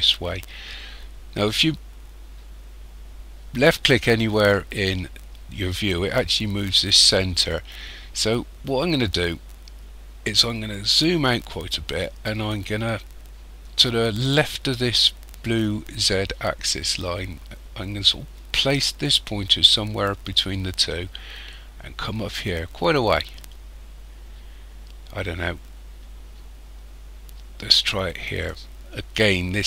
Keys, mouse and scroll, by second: 9.2-10.7 scroll down 4, 10.7 scroll down 2, 28.2 click.